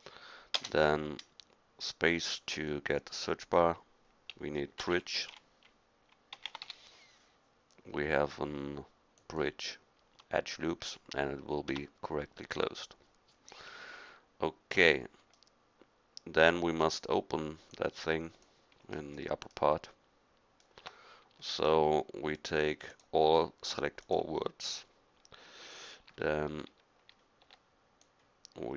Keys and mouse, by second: 0.6 space, 4.6-9.4 right drag, 9.9-11.7 drag, 11.7 Tab, 12.7-14.8 middle drag, 15.7 middle click, 19.2-19.6 middle drag, 20.8 Tab, 25.1-26.1 middle drag, 26.1 a, 26.7 x, 27.5 c.